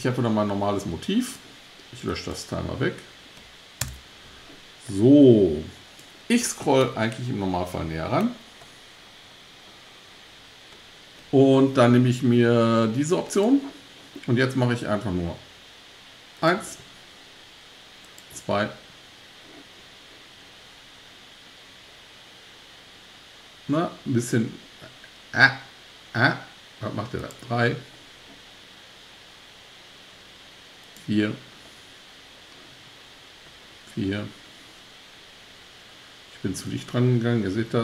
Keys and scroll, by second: 3.8 BackSpace.